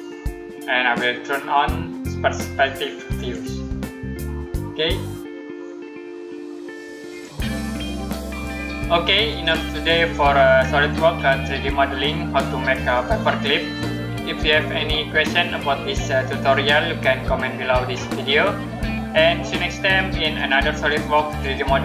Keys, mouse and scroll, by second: 3.0 click, 7.0 click.